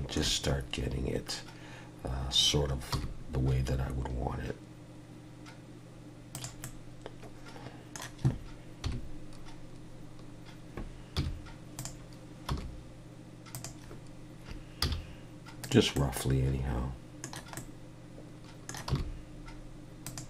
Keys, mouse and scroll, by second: 0.4 scroll up 1, 2.9 r, 6.6 middle click, 8.8 KP_3, 11.1 z, 12.5 r, 14.8 z, 15.9 middle click, 17.5 middle click, 18.9 r.